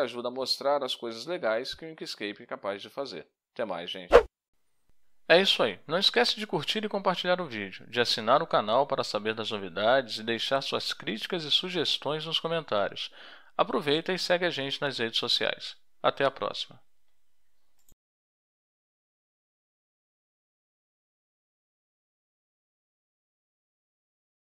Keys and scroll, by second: 2.0 3.